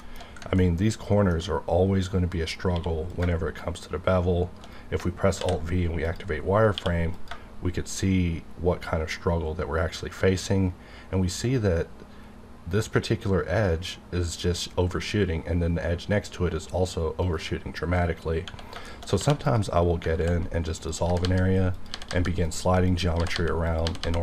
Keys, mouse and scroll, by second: 0.6 ctrl+middle click, 2.7 q, 3.1 click, 4.6 shift+right click, 5.3 alt+v, 6.0 click, 6.7 q, 7.1 click, 11.8-14.6 typing, 13.0 click, 17.2 click, 17.3 right click, 18.2 scroll down 1, 18.9 shift+middle click, 19.2 2, 19.4 click, 19.5 click, 20.1 ctrl+x, 20.8 click, 21.0 g, 21.2 g, 21.7 click, 21.9 g, 22.1 g, 22.5 click, 23.2 g, 23.3 g, 23.7 click, 24.0 g.